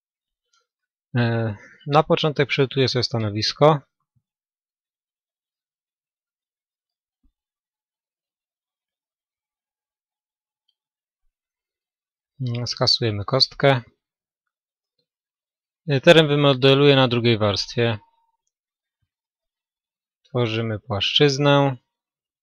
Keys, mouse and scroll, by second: 5.2-7.2 right drag, 11.8 x, 16.2-18.1 drag.